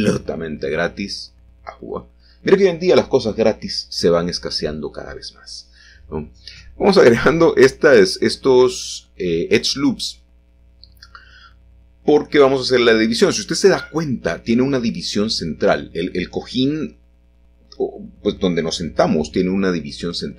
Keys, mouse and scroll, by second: 1.2 ctrl+r, 2.0-2.5 scroll up 1, 2.5-3.8 drag, 2.5 scroll up 1, 5.3 s, 6.2 z, 9.4-10.5 drag, 11.7 s, 13.0-14.1 drag, 16.2 shift+middle click, 16.8-17.8 scroll down 1.